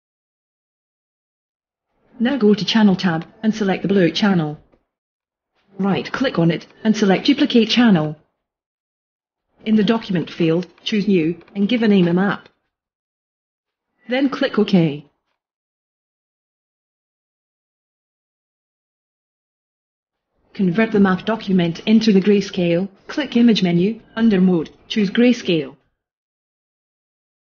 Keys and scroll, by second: 12.3-13.9 typing.